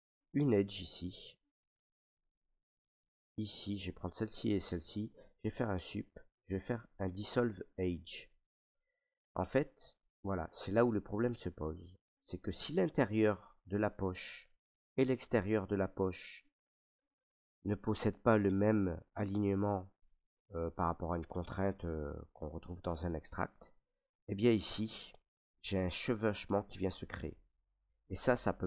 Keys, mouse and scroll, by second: 0.0 right click, 2.9 click, 3.8 shift+right click, 5.1 Delete, 7.2 click, 8.7 middle click, 9.2 middle click, 9.7 middle click, 10.0 middle click, 10.2 middle click, 10.9 shift+middle click, 11.9 middle click, 12.7 ctrl+middle click, 14.4 alt+middle click, 15.3 middle click, 16.2 shift+middle click, 16.5 scroll, 17.0 middle click, 22.0 middle click, 23.0-28.2 middle drag.